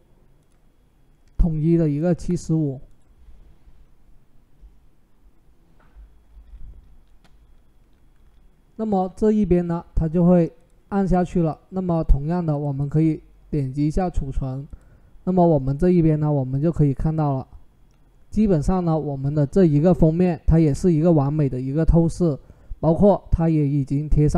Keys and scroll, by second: 1.9 typing.